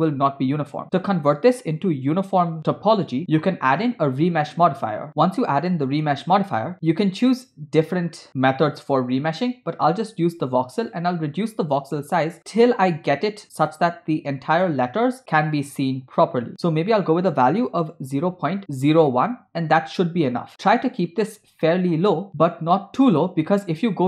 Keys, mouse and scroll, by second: 0.8 scroll down 3, 3.2 Tab, 3.8-6.0 drag, 11.8-14.0 drag, 14.0-15.3 middle drag, 15.3-16.5 drag, 16.6-18.6 drag, 20.3-20.7 scroll up 6, 20.7-21.2 scroll down 2, 21.7-22.3 shift+middle drag.